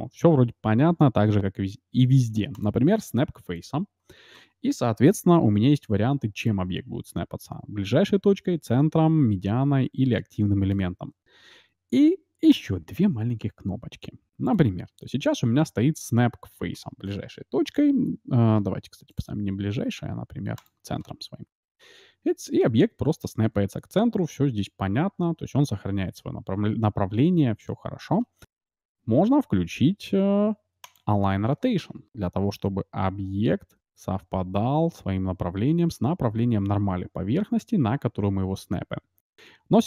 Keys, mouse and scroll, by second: 3.5-5.1 drag, 4.8-6.3 scroll up 1, 6.3-7.9 drag, 6.3-6.7 scroll up 1, 12.5-14.2 drag, 14.4-16.3 drag, 19.1-20.8 drag, 21.5 g, 30.8-32.5 drag, 32.5 g.